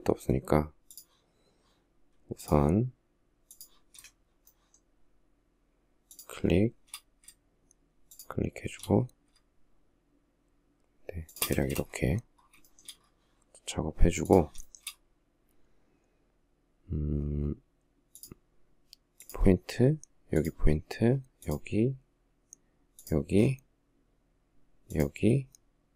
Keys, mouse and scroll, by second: 3.8 shift+middle click, 5.4 shift+click, 7.4 shift+click, 10.6 shift+click, 10.9 space, 12.0 shift+middle click, 14.0 shift+middle click, 14.1 shift+double middle click, 25.7 space.